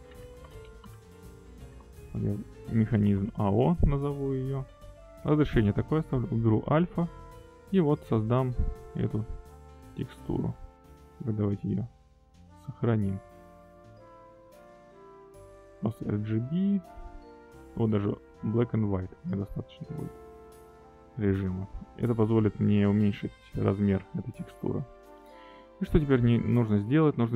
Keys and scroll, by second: 1.6-3.3 typing, 4.6 shift+-, 4.8 a, 5.0 o.